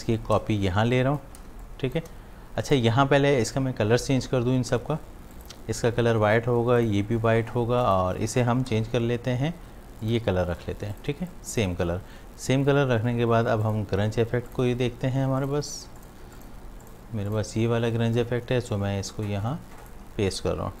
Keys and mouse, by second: 0.2-1.5 alt+drag, 1.5 shift+space, 1.6 click, 2.0 space, 2.6 click, 5.4 click, 8.7 i, 10.0 click, 10.6 v, 11.0 click, 11.1 space, 11.3 click, 11.6 space, 13.6 click, 14.8-20.7 drag, 20.7-20.8 typing.